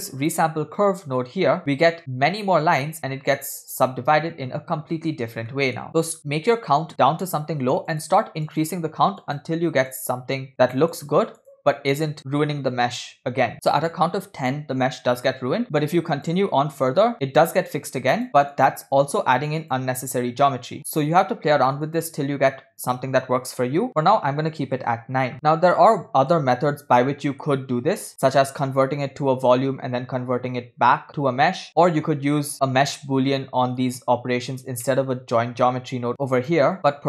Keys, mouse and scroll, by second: 1.6-2.7 scroll up 2, 2.7 scroll down 1, 4.3-4.8 scroll down 2, 4.8 scroll up 2, 5.6 shift+middle drag, 6.2 click, 7.3 click, 8.0-12.2 drag, 15.6 click, 16.1 click, 17.1 click, 18.2 click, 18.5 click, 19.6 click, 20.9 click, 21.9 click, 22.8 click, 23.9-25.3 drag, 25.3 scroll down 3, 25.4-26.5 middle drag, 27.0-27.5 middle drag, 31.7-32.5 middle drag, 33.4 scroll down 1, 34.9 scroll down 2, 34.9-35.7 middle drag, 36.2 scroll up 1, 36.4 click.